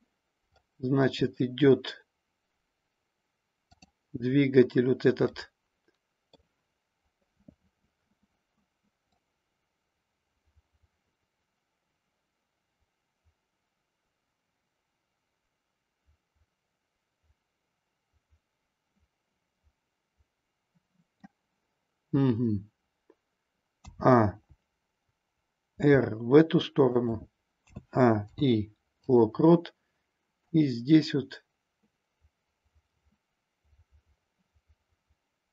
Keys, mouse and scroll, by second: 0.6-1.4 middle drag, 5.3-6.4 middle drag, 9.1-21.2 drag, 23.8 a, 25.8 r, 26.9 click, 27.7 a, 28.2 i, 30.4-35.5 drag.